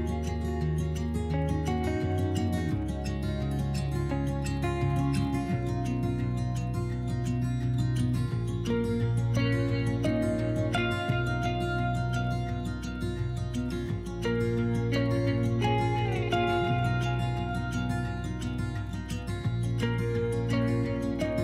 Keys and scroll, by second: 2.3 s, 9.9 s, 16.8 ctrl+z.